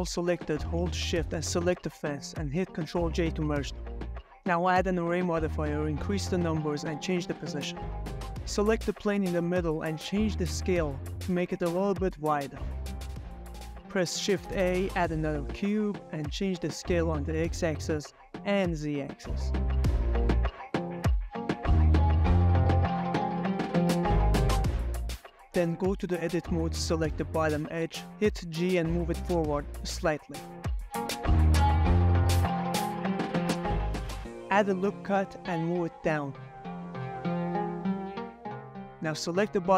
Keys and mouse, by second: 0.3 g, 0.4 x, 2.6 click, 2.9 ctrl+j, 3.8-4.3 drag, 4.4 middle click, 5.0 middle click, 5.5 click, 5.7 ctrl+middle click, 5.9 middle click, 6.3 click, 6.5 middle click, 6.5 g, 6.6 x, 8.1 Escape, 8.1-8.5 middle drag, 8.1 x, 8.1 y, 8.7 middle click, 8.7 s, 8.8 y, 9.0 Escape, 9.1 middle drag, 9.7 middle click, 10.3 g, 10.5 x, 10.7 Escape, 10.8 s, 11.8-13.0 typing, 12.8 click, 15.1 middle click, 15.4 middle click, 15.7 shift+a, 17.4 g, 17.6 x, 17.8 y, 19.2 middle click, 19.4 s, 19.5 x, 19.8 y, 21.9 click, 22.1 g, 22.2 y, 23.3 s, 23.8 z, 25.7 middle click, 25.9 shift+middle click, 26.3 middle click, 26.7 shift+middle drag, 26.9 middle click, 27.2 Tab, 27.5 click, 27.9 middle click, 28.1 2, 28.4 click, 28.9 middle click, 29.5 g, 29.5 x, 29.8 y, 33.9 click, 34.0 Tab, 34.1 g, 34.6 click, 34.9 ctrl+click, 34.9 q, 35.2 Tab, 35.4 click, 36.3 ctrl+r, 38.7 click, 38.9 middle click, 39.4 shift+middle click.